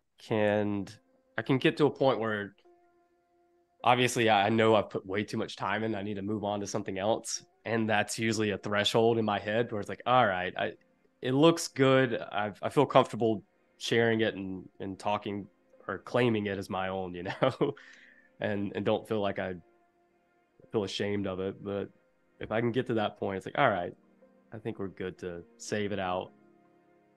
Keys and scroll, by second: 14.1 super+f, 17.6 super+[, 18.9 super+], 20.5 i, 22.4 a.